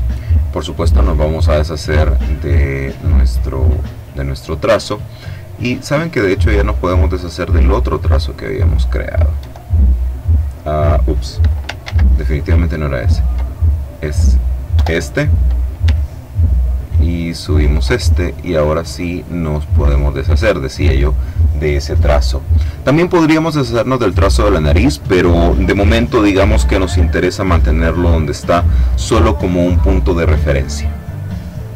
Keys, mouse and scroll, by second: 1.0 click, 2.6 click, 5.8 click, 7.2 click, 8.4 click, 9.5 Delete, 12.0 ctrl+z, 12.6-13.8 drag, 14.0 click, 14.8 Delete, 16.1-18.3 ctrl+drag, 18.8 click, 20.3 click.